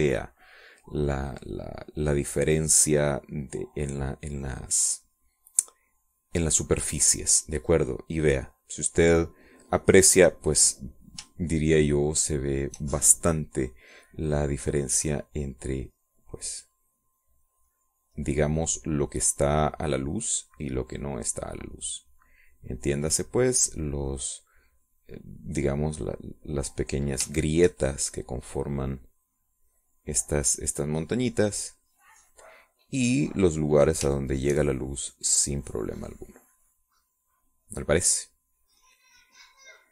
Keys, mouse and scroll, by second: 0.0 click, 0.5 click, 1.2 click, 7.1-8.4 drag, 8.8-9.9 drag, 10.2 click, 10.9 click, 13.2-14.4 shift+drag, 17.6-25.8 drag, 25.9-28.6 drag, 28.7 shift+click, 29.3-30.4 shift+drag, 30.4-35.5 shift+drag, 35.6-38.9 shift+drag.